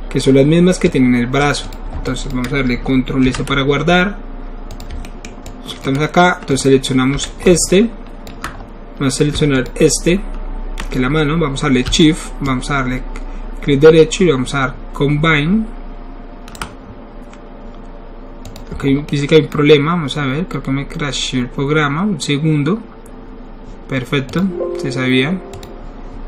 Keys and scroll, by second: 3.2 ctrl+alt+s, 7.5 alt+q.